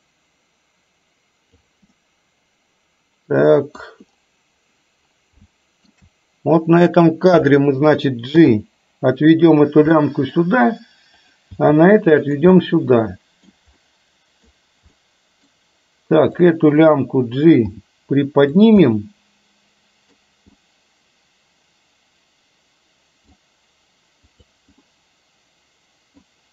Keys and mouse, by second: 2.1-3.8 middle drag, 5.6-5.9 shift+middle drag, 6.9 click, 8.4 g, 10.1 middle click, 11.6 g, 12.6-13.6 middle drag, 13.8-14.4 middle drag, 15.1-15.4 middle drag, 16.4 click, 17.7 g, 18.8-20.2 middle drag, 20.7-23.4 middle drag, 24.4 click, 24.8-26.3 middle drag.